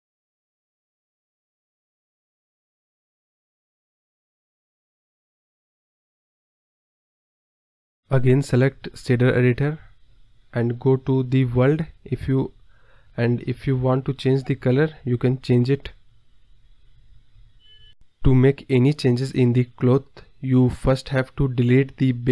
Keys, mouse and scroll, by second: 2.3 space, 2.7 space, 3.0 click, 3.1 space, 3.2 click, 4.1 click, 5.6 space, 6.2 click, 8.2 space, 12.4 click, 13.3-14.3 scroll down 6, 15.9 click, 20.0 click, 21.2 click, 21.6 space.